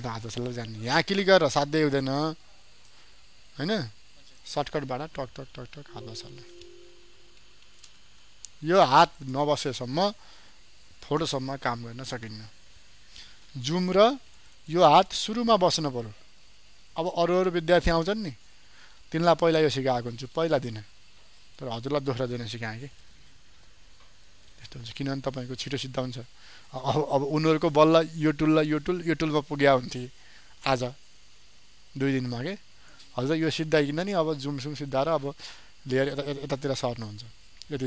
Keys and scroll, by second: 5.4 ctrl+alt+z, 5.5 ctrl+alt+2, 5.7 ctrl+alt+z, 6.9 ctrl+shift+z, 14.0 ctrl+space.